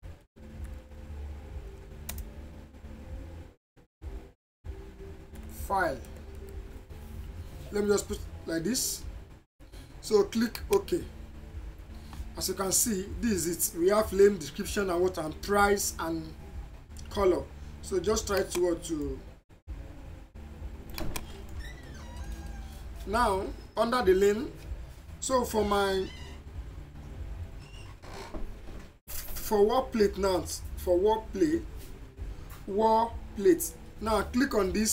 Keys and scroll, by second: 0.0-0.7 typing, 2.1 space, 5.5-6.8 typing.